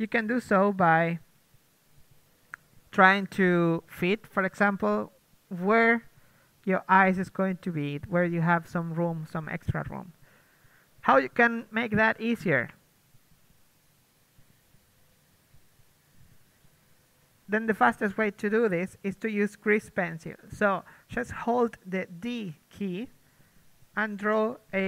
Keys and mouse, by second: 0.6-2.4 typing, 3.5-7.3 typing, 5.0 Tab, 6.1 Tab, 8.0 Tab, 8.8 KP_1, 10.4 Tab, 11.3 Tab, 11.6-13.1 drag, 11.9 Tab, 12.0 a, 12.2 a, 12.2 g, 12.7 Tab, 13.1 Tab, 13.3 Tab, 13.7 Tab, 14.1 Tab, 15.0 Tab, 15.3 Tab, 15.6 g, 16.1 Tab, 17.0 Tab.